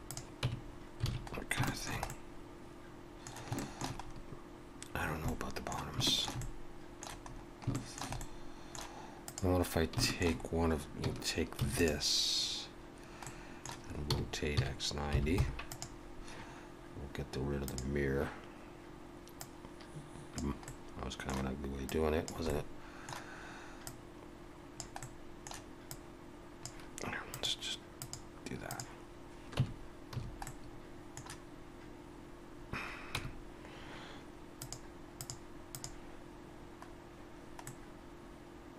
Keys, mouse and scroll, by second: 0.4 Tab, 0.7-1.7 scroll down 5, 1.1 alt+a, 1.7 shift+middle click, 2.1 middle click, 3.6 shift+middle click, 4.0 scroll up 1, 5.0 scroll down 3, 5.2 middle click, 6.0 shift+middle click, 6.4 middle click, 7.3-7.7 scroll up 2, 7.7 shift+middle click, 8.2 middle click, 9.3 click, 9.7 scroll down 1, 10.0 shift+middle click, 11.6 shift+d, 13.2 middle click, 14.1 r, 17.7 click, 20.7 middle click, 21.9 click, 23.9 click, 25.0 middle click, 25.9 click, 27.3 click, 29.6 Tab, 30.1 a, 30.4 middle click, 33.2 Tab, 34.6 click, 36.9-37.6 scroll down 1, 37.6 middle click.